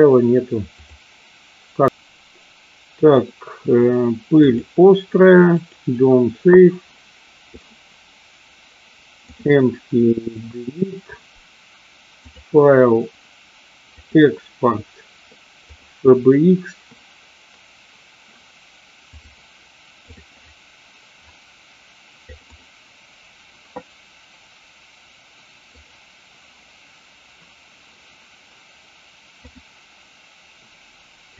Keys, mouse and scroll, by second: 1.9-6.0 drag, 10.4 Delete, 12.3-15.9 drag, 29.4-31.3 drag.